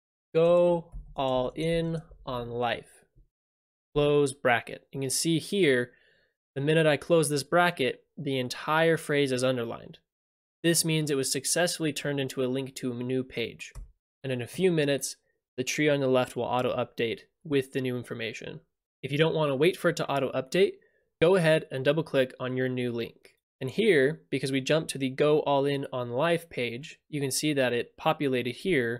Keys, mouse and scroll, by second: 0.0-1.3 typing, 3.9 ], 13.7 Return, 23.4 click.